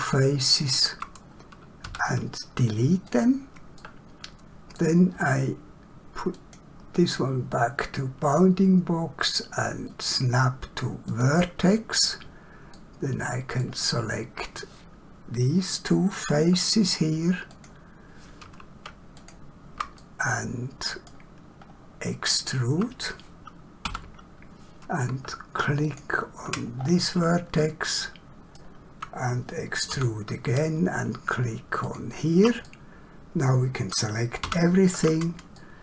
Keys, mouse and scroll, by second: 1.9 x, 3.0 click, 3.8 middle click, 6.4 click, 10.0 click, 12.7 middle click, 17.5 click, 19.2 shift+click, 20.0 middle click, 21.6 scroll up 1, 23.9 e, 26.8 scroll down 1, 27.6 shift+middle click, 30.0 e, 32.7 middle click, 34.4 a, 35.5 shift+middle click.